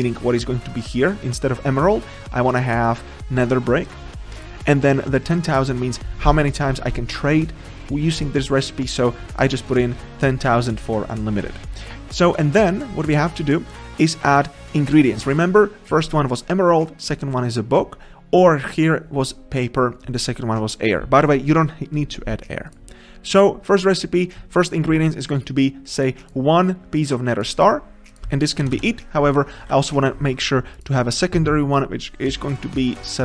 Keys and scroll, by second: 29.6 ctrl+z.